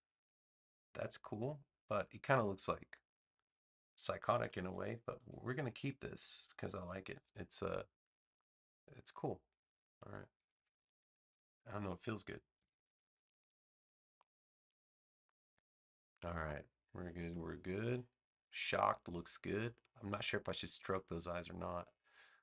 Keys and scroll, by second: 4.3 super+c, 4.5 super+v, 12.5 super+g, 16.1 space.